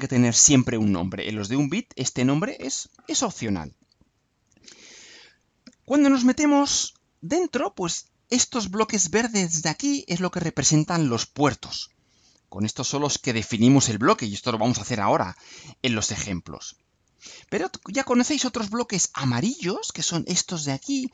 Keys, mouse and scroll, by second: 6.7 click, 16.7 click.